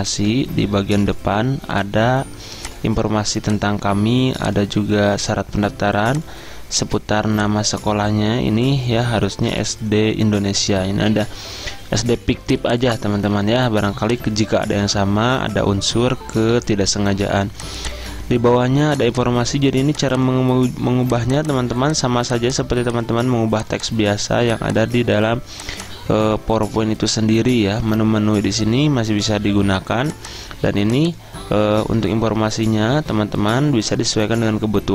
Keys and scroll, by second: 9.2 Caps_Lock, 9.3-10.3 typing.